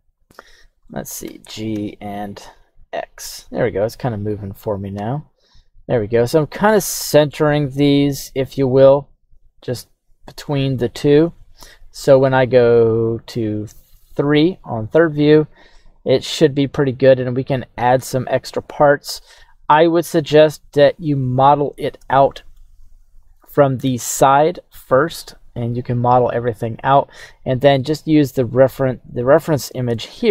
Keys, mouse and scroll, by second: 0.2 x, 0.9 middle click, 1.3 g, 1.8 x, 3.8 click, 4.9 KP_1, 5.6-6.8 scroll up 2, 6.8-7.4 scroll up 2, 7.4 right click, 7.5 g, 7.9 x, 9.5 click, 10.5-13.4 middle drag, 13.8 KP_3, 19.8-22.7 shift+middle drag, 28.4 scroll up 2, 28.5-29.0 scroll down 2, 29.0 scroll up 1, 29.1-29.6 scroll down 1, 29.6-30.3 scroll up 1.